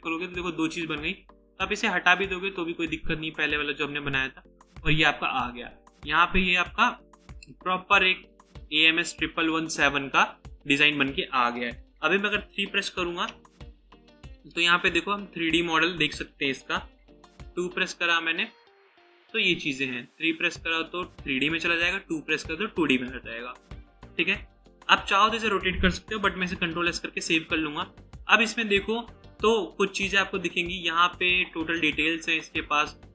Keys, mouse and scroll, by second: 6.2-6.6 scroll down 1, 7.5 right click, 12.2 3, 13.2 right click, 17.3 typing, 21.9-22.2 typing, 23.4 right click, 26.4 ctrl+s.